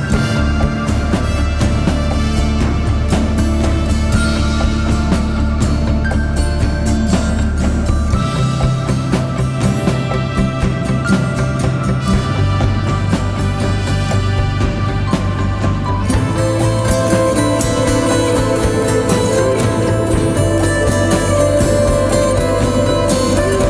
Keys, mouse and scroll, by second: 13.8 double click, 16.1-17.2 typing, 21.7 typing.